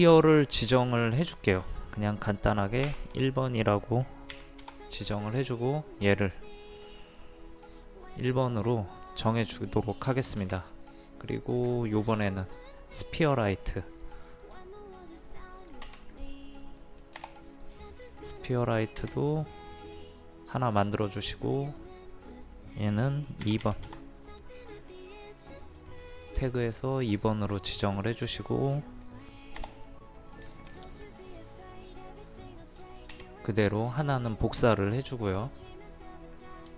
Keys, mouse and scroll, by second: 0.8 click, 2.9 KP_1, 4.3 KP_Decimal, 7.0 click, 10.0 shift+middle click, 13.2-16.8 drag, 16.8 middle click, 17.6 click, 23.4 KP_2, 23.6 KP_Decimal, 25.7 click, 28.5 middle click, 29.6 m, 30.5 ctrl+click, 34.4 shift+middle click, 36.6 scroll down 1.